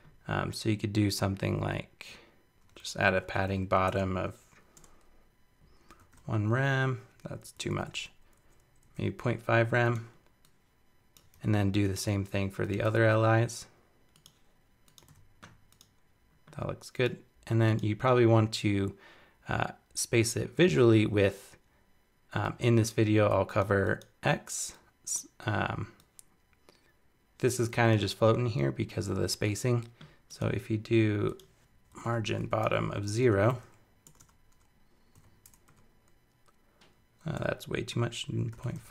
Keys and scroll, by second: 7.5 alt+Down, 11.3 super+c, 12.8 super+v.